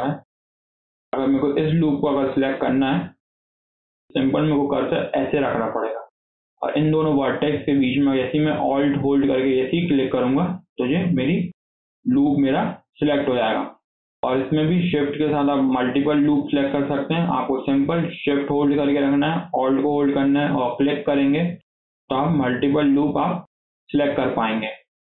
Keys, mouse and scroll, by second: 1.7 click, 2.0 scroll up 1, 2.3-5.3 shift+middle drag, 6.0 scroll up 2, 6.2-9.4 shift+middle drag, 9.7 alt+click, 10.0 scroll down 3, 10.2 shift+middle click, 10.5 shift+scroll up 1, 10.9-13.6 shift+middle drag, 13.6 scroll up 3, 13.8 shift+middle click, 14.2 scroll down 2, 14.4-17.4 shift+middle drag, 20.6 alt+shift+click, 22.0 alt+shift+click, 22.9 alt+shift+click, 23.9 alt+shift+click, 24.2 scroll down 3, 24.4-25.1 middle drag.